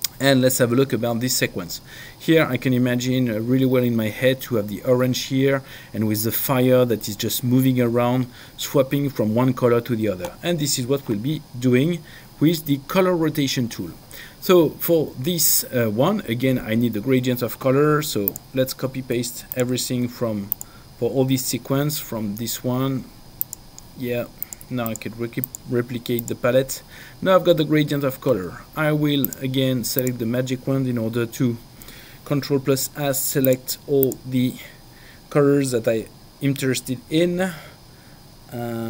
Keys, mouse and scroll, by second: 18.3 click, 19.5 shift+click, 20.5 click, 23.4 click, 29.2 click, 33.5 ctrl+alt+click.